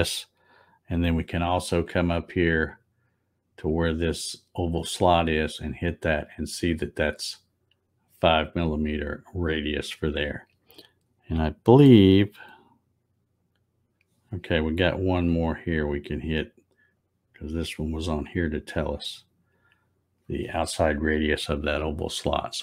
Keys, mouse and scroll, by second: 4.8 click, 6.0 click, 17.0 click, 19.6 click.